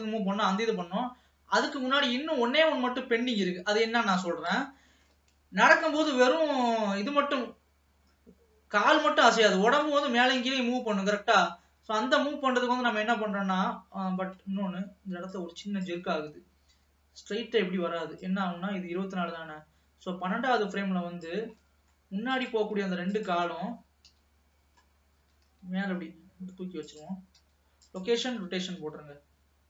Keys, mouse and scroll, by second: 0.4 scroll down 1, 4.6 space, 5.2 ctrl+s, 5.7 space, 12.0 space, 12.7-13.1 scroll down 2, 13.1-14.2 middle drag, 14.2-15.4 scroll up 7, 15.4 click, 16.1 space, 17.6 space, 18.4-21.4 drag, 21.7 middle click, 22.4 click, 23.2 shift+click, 24.1 KP_3, 24.8-25.4 scroll up 2, 25.4 g, 28.7 ctrl+s, 29.1 space.